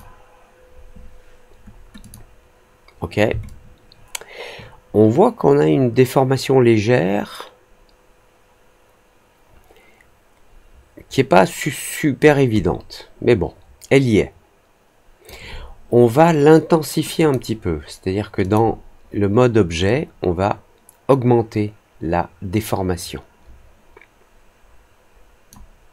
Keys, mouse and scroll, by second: 1.9 click, 3.4-12.1 alt+drag, 12.5-15.2 alt+drag, 17.1 click, 18.3 click, 19.8-25.4 drag.